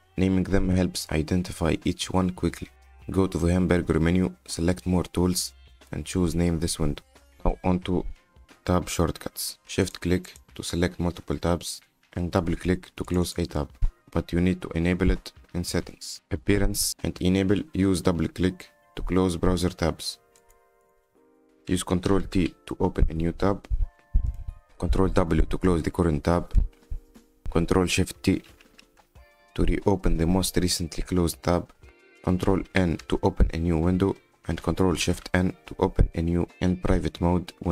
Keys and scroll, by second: 22.9 ctrl+t, 27.1 ctrl+w, 29.3 ctrl+shift+t, 33.0 ctrl+n, 34.9 ctrl+shift+n.